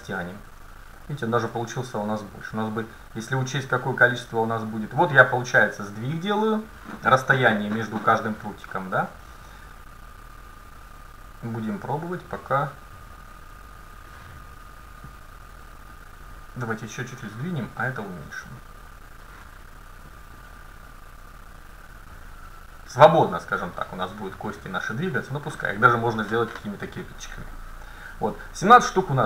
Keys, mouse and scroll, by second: 1.0-3.0 middle drag, 4.0-6.4 drag, 10.3-14.1 drag, 15.9-22.3 drag.